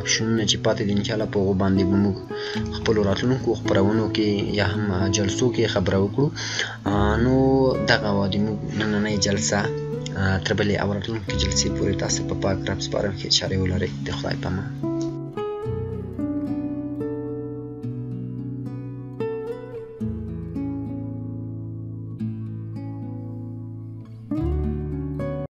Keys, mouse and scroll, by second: 2.3 click, 2.3 click.